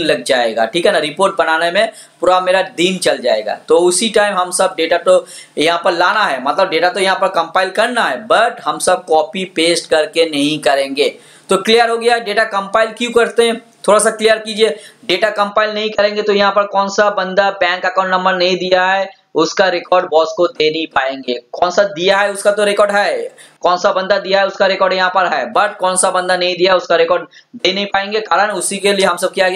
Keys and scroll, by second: 23.6 alt+Tab.